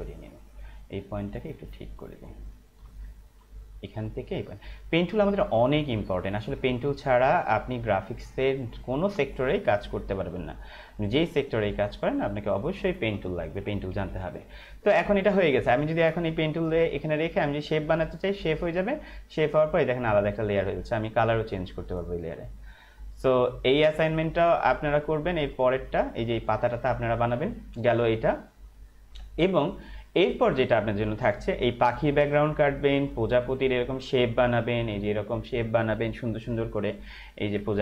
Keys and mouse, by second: 0.0 space, 0.1 click, 0.5 space, 1.0 click, 2.9 space, 3.0 click, 3.4 space, 3.6 click, 5.5 space, 5.7 click, 6.0 space, 6.2 click, 6.3 space, 7.0 click, 9.2 space, 9.4 click, 9.7 space, 10.7 click, 12.7 space, 12.8 click, 14.1 ctrl+-, 16.6 click, 22.5 click, 30.3 click, 33.5 click, 37.2 Left.